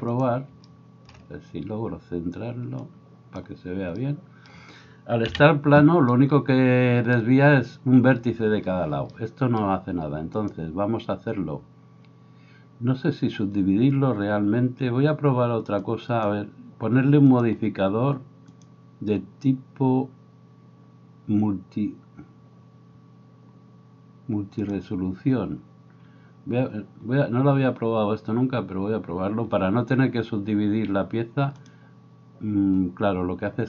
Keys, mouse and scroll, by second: 5.3 KP_Decimal, 17.4-18.7 middle drag, 18.7-33.6 drag.